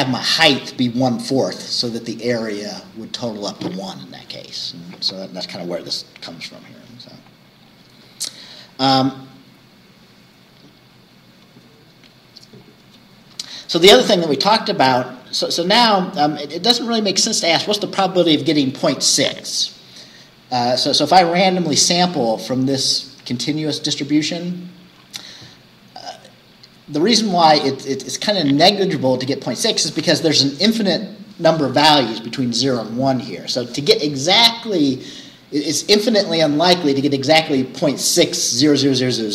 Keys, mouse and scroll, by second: 6.7-9.0 scroll down 10.